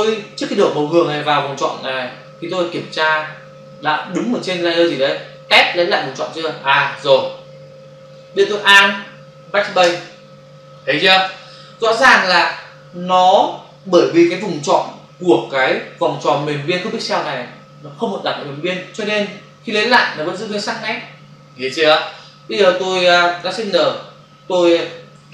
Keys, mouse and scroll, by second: 8.0 click, 9.8 alt+BackSpace, 11.2 ctrl+d, 13.3 v, 21.9 ctrl+click, 23.7 ctrl+shift+n, 24.5 typing.